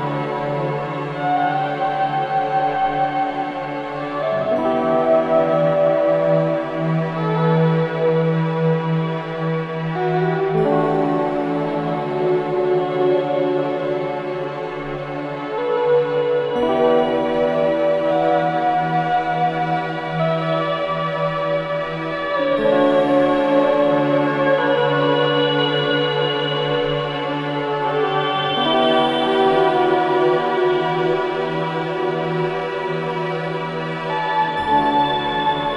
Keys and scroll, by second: 2.9 Delete, 6.1 ctrl+z, 12.1 ], 17.0 F9, 22.5 ctrl+z, 31.2 ctrl+z, 32.9 ctrl+z.